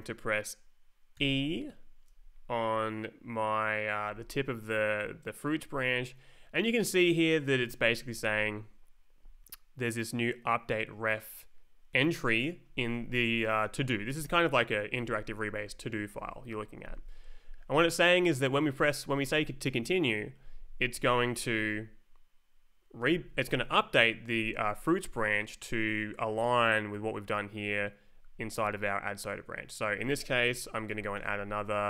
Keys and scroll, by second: 1.1 e, 13.0 Up, 13.7 Down, 14.4 Up, 14.9 Up, 15.5 Down, 16.1 Up, 16.5 Down, 31.2-31.8 typing.